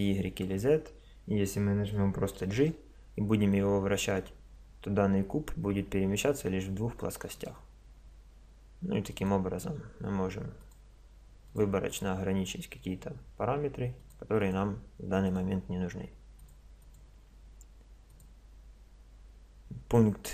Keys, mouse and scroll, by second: 2.6 g, 9.1-13.7 drag, 13.9-19.9 drag.